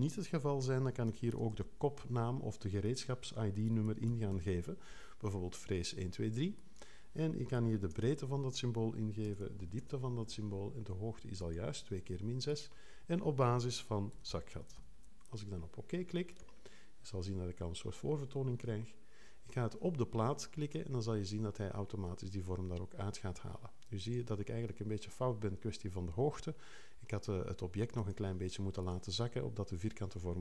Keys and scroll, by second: 0.8-2.0 typing, 3.8 l, 4.1 2, 7.3-10.2 typing, 13.6-15.2 typing, 18.7 3.